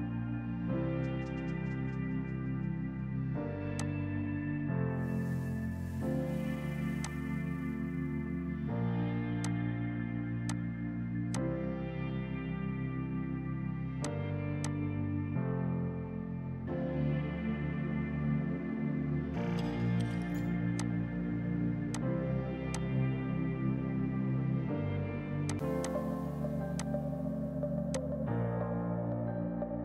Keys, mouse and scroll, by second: 1.8 space, 3.8 click, 4.9 4, 5.3 Return, 6.4 space, 7.0 click, 8.7 space, 9.5 click, 10.1 F5, 10.5 click, 11.4 ctrl+click, 11.8-13.0 typing, 14.0 click, 19.0 ctrl+Num_Lock, 20.0 ctrl+shift+q, 20.8 click, 21.5 ctrl+z, 22.0 click, 22.8 click, 24.0 F12, 25.5 click.